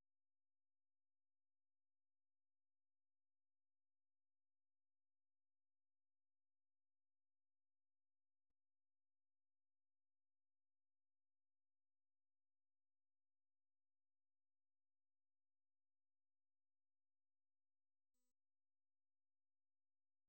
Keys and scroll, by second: 0.2-2.0 typing.